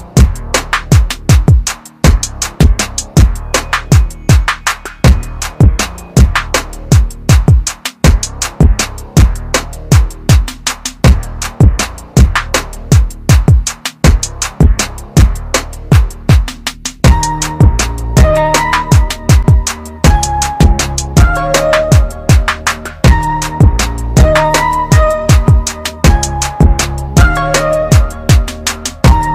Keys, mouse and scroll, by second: 4.0 click, 16.9 typing, 18.0 typing, 19.5 click.